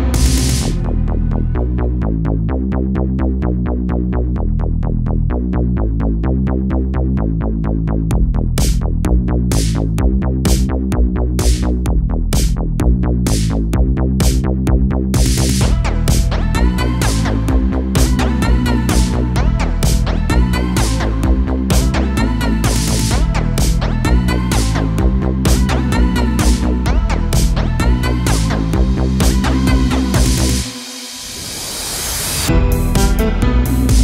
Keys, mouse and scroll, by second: 0.9 ctrl+click, 1.8 ctrl+z, 2.5-3.5 ctrl+drag, 3.5-5.7 middle drag, 5.7 click, 6.5 ctrl+z, 7.3-8.9 drag, 8.9 ctrl+z, 9.5-14.7 middle drag, 14.7 ctrl+click, 15.7 ctrl+z, 16.4-18.6 ctrl+drag, 18.6-21.6 middle drag, 22.8-25.6 drag, 25.6-28.6 middle drag, 32.9-34.0 drag.